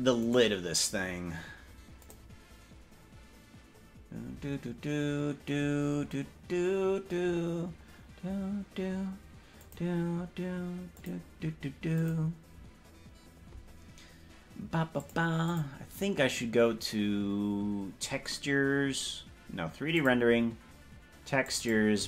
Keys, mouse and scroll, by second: 0.4 right click, 2.1 click, 9.7-11.2 drag, 12.0 click.